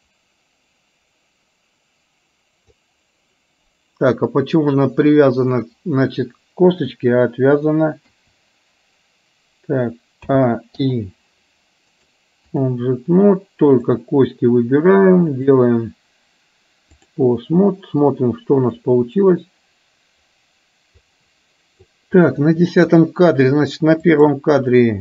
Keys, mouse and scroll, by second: 8.1 i, 10.2 a, 10.9 i, 12.0 click, 15.5-17.1 drag, 18.9-22.0 drag, 22.2 middle click, 24.1 click.